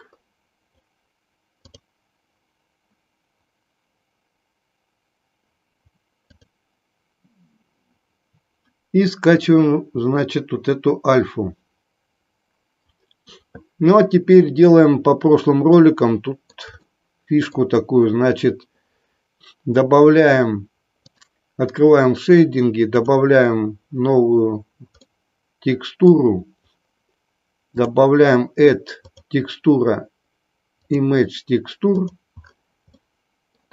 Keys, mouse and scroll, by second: 0.8-4.4 scroll down 1, 4.4-11.8 scroll down 1, 11.8-12.9 scroll down 1, 12.9-14.8 scroll down 1, 14.8-15.5 scroll down 1, 15.5 scroll down 1, 15.8-16.7 middle drag, 16.9-17.7 shift+middle drag.